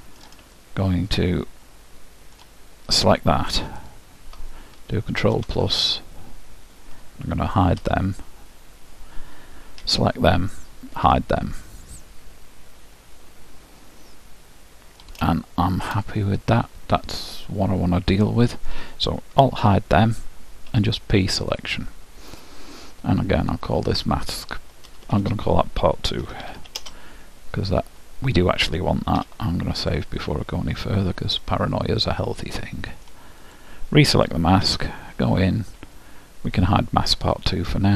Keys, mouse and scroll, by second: 0.6-2.4 middle drag, 3.8-5.7 drag, 7.9 h, 8.5-11.0 middle drag, 9.8 l, 11.1 h, 11.4-14.0 middle drag, 15.3-17.9 middle drag, 19.6 alt+h, 20.8 p, 23.8-25.9 drag, 25.0 BackSpace, 25.2 BackSpace, 28.0-29.2 middle drag, 29.2 ctrl+w, 30.6-31.4 scroll up 1, 31.4-33.3 middle drag, 33.5-35.2 drag, 34.6 Tab, 36.5-37.9 drag, 37.2-37.9 middle drag.